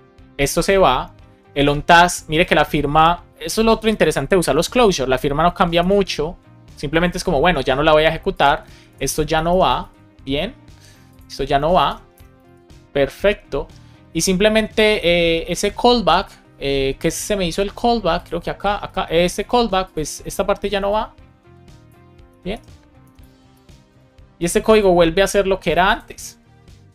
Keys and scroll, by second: 4.5 BackSpace, 5.0 Left, 5.4 Right, 5.7 alt+shift+Left, 8.8 shift+super+Left, 9.3 BackSpace, 9.7 super+s, 11.5 shift+super+Left, 11.8 BackSpace, 12.4 super+s, 22.2 BackSpace, 23.9 super+s.